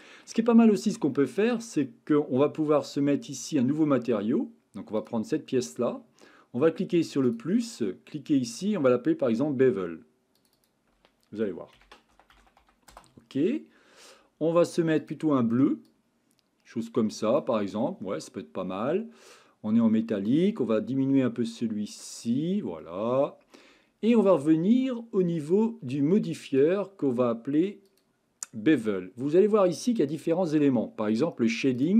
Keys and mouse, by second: 0.5-0.9 middle drag, 1.1-1.5 shift+middle drag, 1.9 middle click, 7.2 click, 8.5 click, 10.3 click, 10.6 click, 15.0 click, 20.3-22.1 drag, 22.8-23.5 middle drag, 26.5 click, 27.9 click, 31.8 drag.